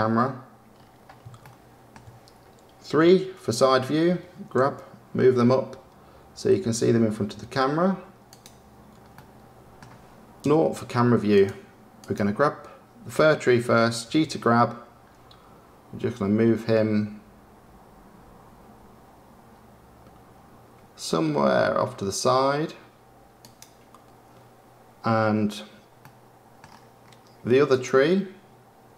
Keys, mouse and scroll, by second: 1.3-2.9 shift+middle drag, 4.5 g, 9.1-10.4 middle drag, 10.4 KP_0, 11.3 click, 12.0 click, 14.0 g, 26.0-26.5 middle drag, 27.3 middle click, 27.7 click, 28.9 KP_0.